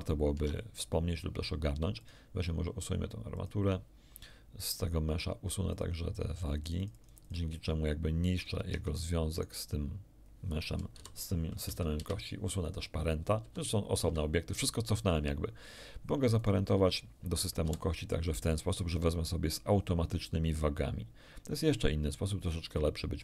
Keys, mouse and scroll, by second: 2.0 click, 3.3 click, 5.7 click, 6.6 click, 8.5 ctrl+Tab, 9.3 ctrl+click, 10.9 alt+p, 11.6 Down, 12.0 Return, 13.4 g, 14.0 Escape, 16.4 shift+right click, 17.6 ctrl+shift+p, 22.0 click.